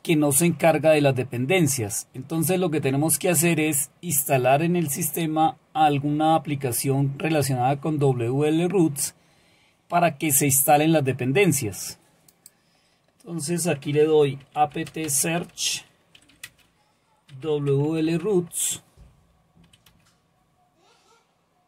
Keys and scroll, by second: 14.2-19.7 typing, 19.9 Return.